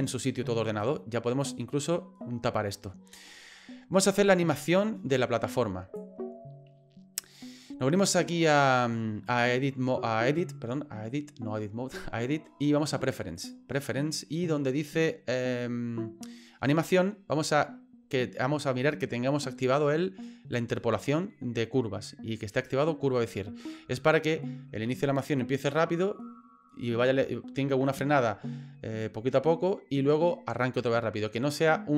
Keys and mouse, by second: 1.4 click, 5.1 click, 9.2-13.7 drag.